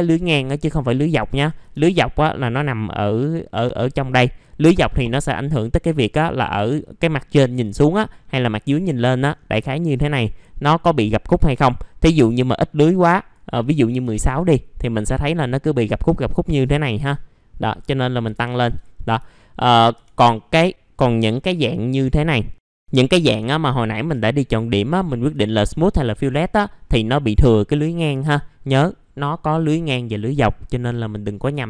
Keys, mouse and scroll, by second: 0.5-0.9 scroll down 1, 3.5-5.3 drag, 6.3 middle click, 6.4 scroll down 1, 6.8 alt+middle click, 8.0 middle click, 8.1-8.7 scroll down 1, 9.4-11.6 scroll up 1, 13.1 click, 13.7 KP_1, 14.8 middle click, 15.2 F4, 17.6 click, 18.3 KP_3, 19.3 alt+middle click, 19.7 scroll down 1, 19.9 F4, 20.2 middle click, 20.3-20.9 scroll down 1, 20.9-21.5 scroll up 1, 24.9 alt+middle click, 25.4 middle click, 26.2-27.6 scroll up 1, 30.3-31.6 scroll down 1.